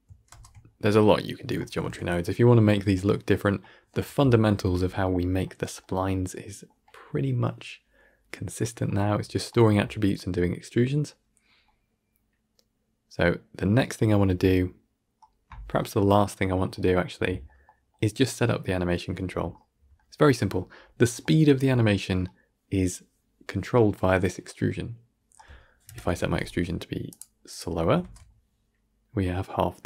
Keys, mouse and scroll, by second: 0.3 shift+space, 0.6-25.8 middle drag, 25.8 shift+Left, 27.0 click, 27.9 shift+space.